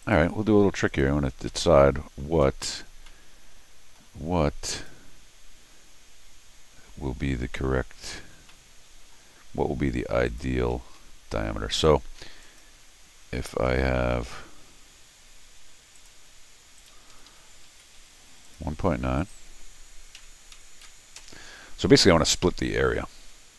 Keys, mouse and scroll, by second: 0.0 click, 0.9 click, 1.3 scroll down 2, 1.5 middle click, 2.3 scroll up 1, 2.4 middle click, 3.1 middle click, 4.7 click, 8.5 middle click, 9.4 scroll down 1, 10.3 click, 11.0 c, 11.7 click, 12.4 click, 13.7 scroll down 2, 15.9 click, 16.8 click, 17.1 Escape, 17.3 Escape, 17.7 d, 18.4 click, 19.2 click.